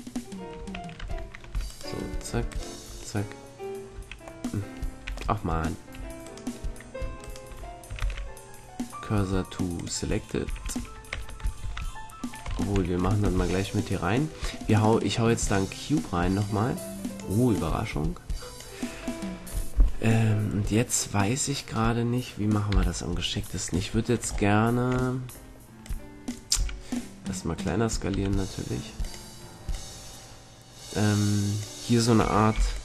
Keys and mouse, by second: 0.9 Tab, 1.6-4.1 right drag, 5.0 a, 7.9 shift+s, 10.4 a, 11.1 Tab, 11.6 shift+a, 12.5 Tab, 13.3 shift+a, 16.7-19.2 drag, 19.2 middle click, 22.7 KP_3, 23.3-25.3 drag, 25.8 click, 26.5 s, 27.3-31.3 drag, 28.1 s, 32.1 a, 32.5 b.